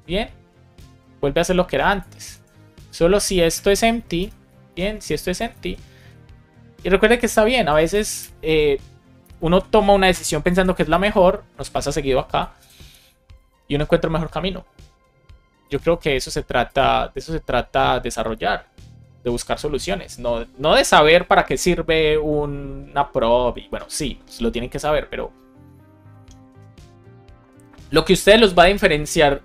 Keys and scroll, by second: 2.3 super+x, 3.0 super+v, 3.3 space, 3.7 shift+7, 4.1 space, 4.6 super+Left, 4.9 shift+1, 5.3 Left, 5.6 shift+super+Right, 5.9 super+x, 7.9 super+v, 8.1 super+s, 9.2 BackSpace, 9.4 super+s, 10.4 alt+shift+f, 10.9 super+s.